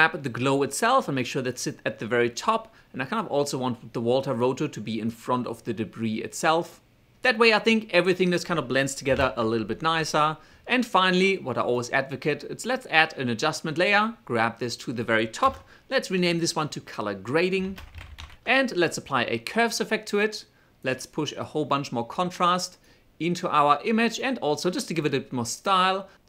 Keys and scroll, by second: 9.4 alt+/, 15.8 Return, 16.8-19.3 typing.